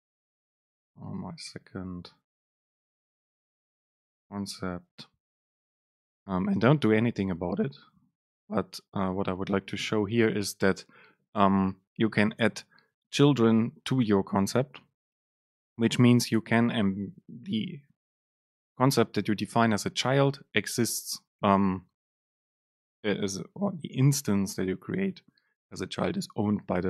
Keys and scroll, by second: 0.7 BackSpace, 10.0 Return.